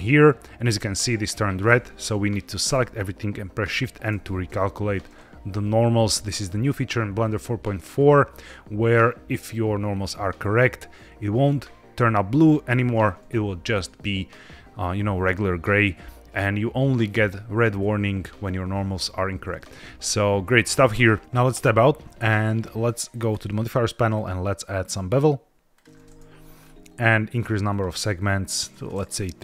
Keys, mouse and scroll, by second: 2.6 a, 4.0 shift+n, 7.9-10.9 drag, 21.1 middle click, 21.2 Tab, 21.4 Tab, 23.2 click, 24.0-26.4 drag, 26.5-27.6 scroll up 2, 27.6 click, 28.5 click, 28.9 scroll up 2.